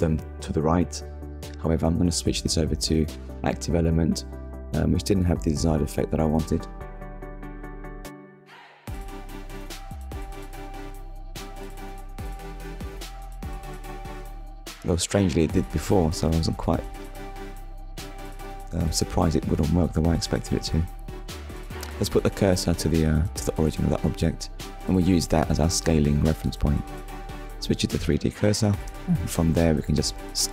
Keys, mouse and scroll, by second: 0.2 click, 0.8 click, 2.6 click, 5.7 click, 6.4 click, 8.1 click, 10.1 click, 11.7 click, 12.5 click, 13.7 scroll up 1, 16.6 Tab, 20.4 shift+s, 21.6 click, 23.6 Tab, 25.3 click, 26.6 click, 28.5 click.